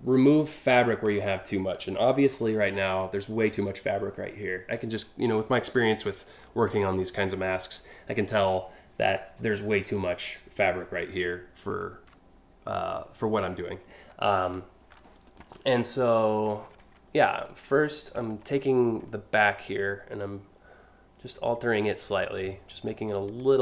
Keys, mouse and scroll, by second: 0.4-0.9 scroll down 2, 1.6-2.1 alt+scroll down 2, 2.2 alt+scroll up 1, 14.0 scroll down 1, 16.1-16.7 scroll up 3, 17.0 space, 17.8-18.2 alt+scroll up 3, 19.8-21.5 drag, 22.9 click, 23.3 click.